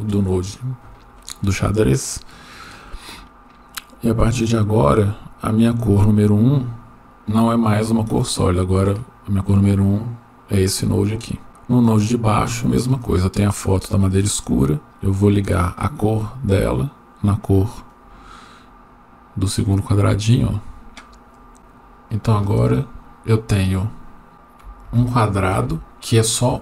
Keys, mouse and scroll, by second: 8.9 click, 9.5-10.6 drag, 11.5 middle click, 12.0-12.7 drag, 14.9-17.9 drag, 21.4-22.6 scroll up 3, 22.6 click, 23.7-24.3 scroll down 1, 24.3-24.8 scroll down 1, 24.8 Tab, 25.7 Tab.